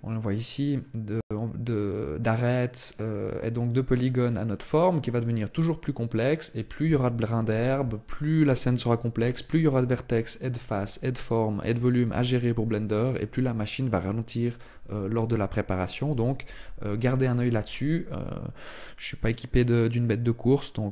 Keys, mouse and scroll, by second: 0.1 middle click, 20.7 Tab.